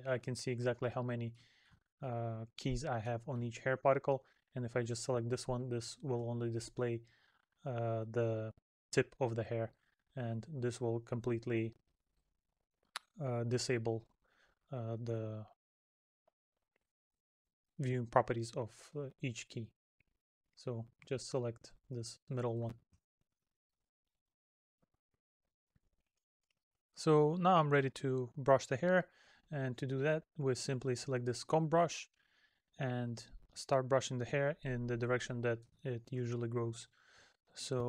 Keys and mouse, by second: 0.0 middle click, 3.1 middle click, 5.5 middle click, 9.2 middle click, 11.2 middle click, 13.9 middle click, 22.4 middle click, 32.6 middle click, 35.1 middle click.